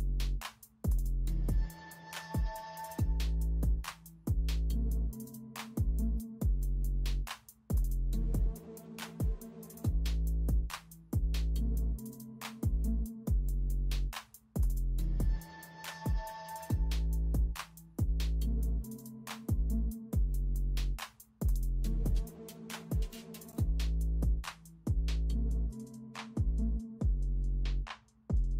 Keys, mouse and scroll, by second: 1.3 ctrl+b, 4.0-4.3 alt+scroll up 1, 4.9 alt+scroll down 1, 7.1 b, 8.8 space, 9.1 space, 10.0 space, 10.7 ], 12.2 [, 12.9 ], 13.1 [, 16.5 space, 19.1 space, 19.4 space, 22.1 ctrl+u, 25.1 space, 26.1 ctrl+b, 26.8 space, 27.0 space, 27.2 space, 27.7 space.